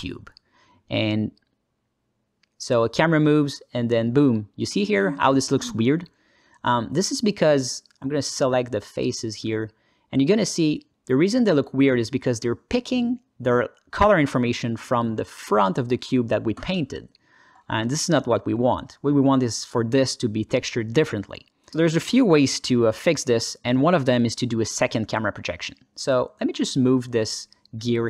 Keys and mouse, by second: 0.5 alt+shift+middle drag, 1.1-4.0 alt+middle drag, 5.2 alt+middle click, 6.0 middle click, 6.3 click, 6.6 Tab, 9.9 alt+shift+z, 10.3 3, 10.5 click, 11.0 shift+click, 13.0 ctrl+space, 13.3 ctrl+alt+middle click, 13.6 ctrl+alt+middle click, 17.9 ctrl+space, 18.6-20.3 alt+middle drag, 22.1 alt+middle click, 22.3 Tab, 23.9 alt+shift+middle click, 26.5 drag, 26.9 g, 27.6 r.